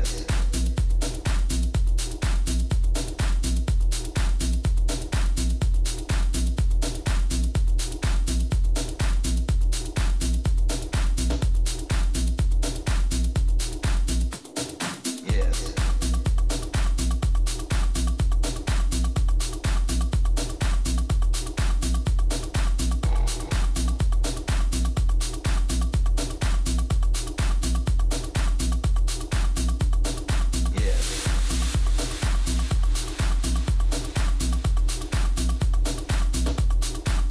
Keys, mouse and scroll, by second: 0.2-2.7 middle drag, 6.8 KP_3, 7.6 z, 9.3 a, 10.0-11.9 right drag, 13.6-15.5 drag, 21.5 z, 22.2-24.7 middle drag, 26.0-31.2 middle drag, 27.1 Tab, 33.8-35.0 middle drag, 34.2 a, 34.5 a, 35.0-37.3 right drag, 35.7 a.